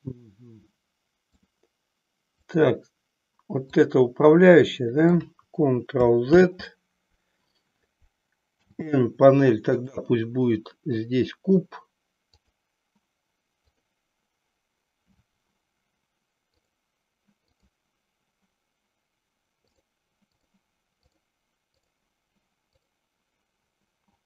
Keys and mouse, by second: 2.6 click, 3.8-5.2 drag, 6.6 ctrl+z, 8.6 n, 9.7-12.7 drag, 13.6 click, 19.8 click, 20.4 click, 21.2 click.